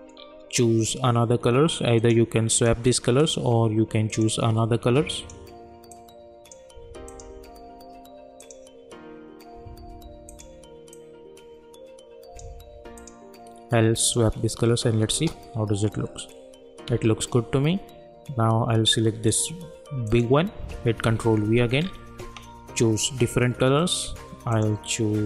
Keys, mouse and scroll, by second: 2.0-13.0 drag, 15.1 space, 19.3 click, 21.0 ctrl+v, 21.8 scroll down 1, 24.5-25.2 drag.